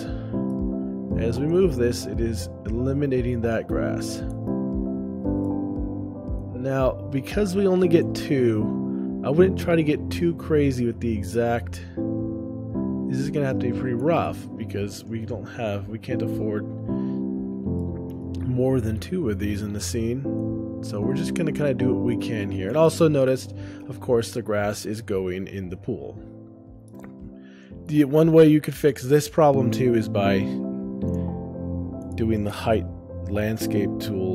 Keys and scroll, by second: 1.0 ctrl+alt+o, 4.5 shift+space, 6.0 ctrl+alt+o, 8.3 shift+space, 10.5 ctrl+alt+o, 14.3 shift+space, 20.1 ctrl+alt+o, 22.9 shift+space, 27.5 ctrl+alt+o, 27.9 shift+space, 29.7 ctrl+alt+o.